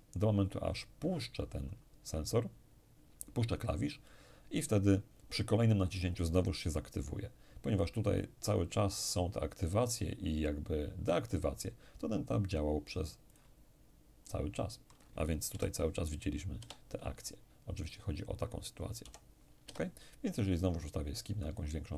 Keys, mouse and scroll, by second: 8.1 click, 12.9-14.9 drag, 15.1 p, 16.2 Escape, 17.5 click, 18.6 p, 19.3 Escape, 20.5 click.